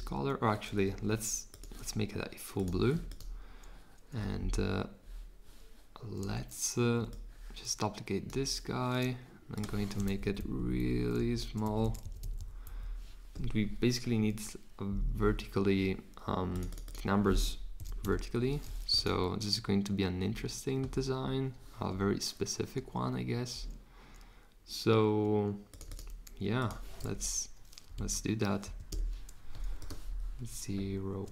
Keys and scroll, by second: 10.2 shift+Down, 10.4 shift+Down, 10.5 shift+Down, 10.8 shift+Down, 11.1 shift+Up, 11.6 Up, 12.0 Up, 12.2 Up, 12.4 Up, 12.6 Down, 17.5-18.5 typing, 27.1 BackSpace, 27.9 super+z, 28.6 Right, 28.8 Return.